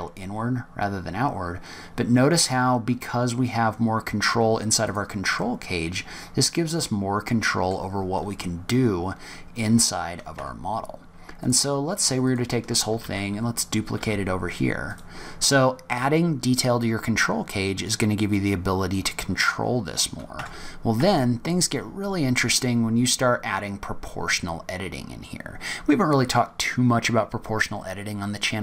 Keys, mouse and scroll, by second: 5.3 middle click, 9.0-9.4 scroll down 3, 9.4 scroll up 2, 10.3 Tab, 10.9 scroll down 2, 11.4 click, 12.2 shift+click, 13.0 shift+d, 19.5 scroll down 3, 19.8-20.3 scroll up 3, 20.3 Tab, 20.9 Tab, 28.4-28.6 scroll up 3.